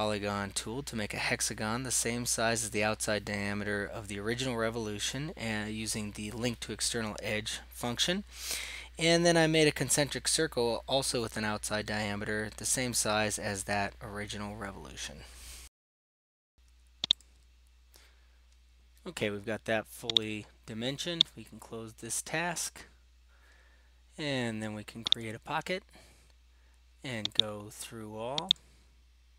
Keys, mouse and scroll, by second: 0.7 click, 1.0 click, 1.5 Escape, 2.0 click, 2.3-3.4 drag, 3.6 click, 4.5 click, 4.9 right click, 5.2 click, 6.5 click, 6.9 click, 7.2 click, 7.4 click, 10.6 right click, 11.1 click, 12.3 click, 12.7 scroll down 2, 12.8-13.2 scroll, 14.0 click, 14.3 click, 16.3 click, 17.3-18.3 drag, 20.2-21.9 right drag, 21.9 click, 25.2-26.4 drag, 27.6-29.3 drag.